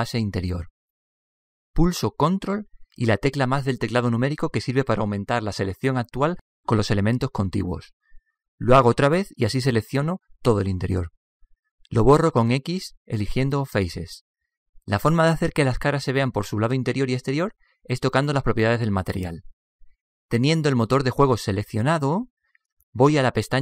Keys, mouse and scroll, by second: 0.6-2.3 right drag, 1.4-3.2 middle drag, 8.3 ctrl+KP_Add, 11.6-13.7 middle drag, 13.2 x, 14.9-16.7 middle drag, 21.2-23.0 drag.